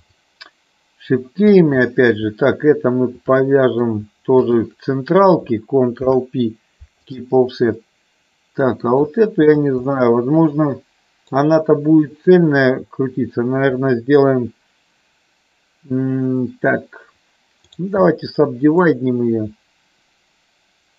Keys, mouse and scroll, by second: 0.0 click, 1.5 click, 3.4 middle click, 6.0 ctrl+p, 7.9-9.0 middle drag, 9.4 click, 10.0-11.4 middle drag, 17.6-19.0 right drag.